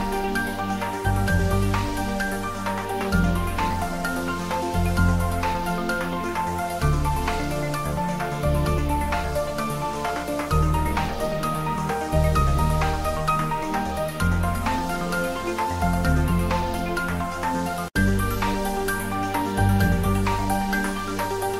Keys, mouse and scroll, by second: 0.0-4.9 ctrl+middle drag, 4.9 click, 5.1 Tab, 5.8 a, 7.9 click, 8.0-9.4 middle drag, 9.4 s, 9.6 click, 9.8 g, 10.3 click, 10.6 ctrl+z, 11.2 g, 11.7 click, 11.8 Tab, 12.1 ctrl+middle click, 15.2 ctrl+3, 16.1 s, 18.8 click, 19.0 ctrl+middle click, 19.8-21.2 shift+middle drag, 21.2 click.